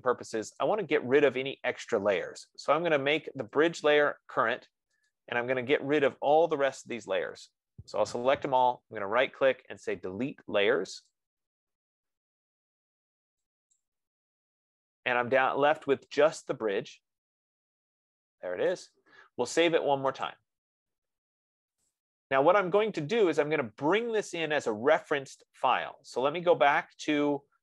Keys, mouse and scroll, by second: 1.0 click, 4.1 click, 5.5 click, 6.6 F15, 7.7 shift+click, 9.1 right click, 11.7 click, 14.1 click, 18.9 right click, 20.7 click, 22.3 click.